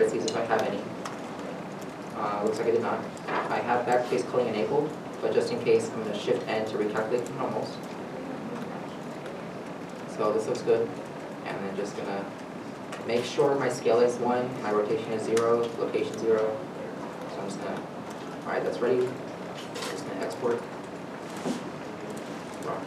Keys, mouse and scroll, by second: 1.6 middle click, 6.3 shift+n, 7.5 middle click, 9.5 Tab, 10.1 middle click, 10.9 middle click, 11.7 ctrl+s, 15.9 ctrl+s, 16.1 middle click, 22.6 r.